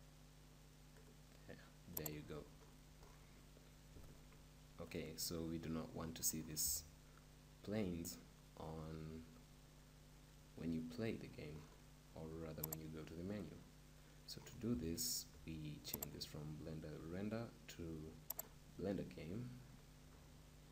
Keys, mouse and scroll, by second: 2.6-4.1 middle drag, 4.1-6.7 right drag, 14.0 click, 14.4-16.3 middle drag, 16.1-18.0 drag.